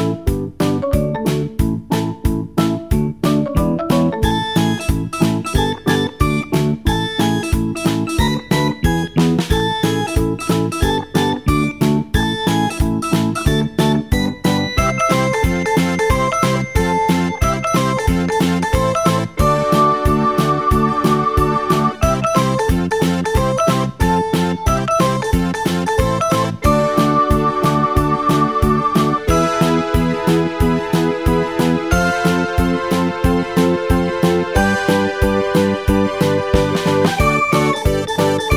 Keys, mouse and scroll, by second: 7.5-10.4 drag, 14.7-22.8 drag, 27.4-38.5 drag.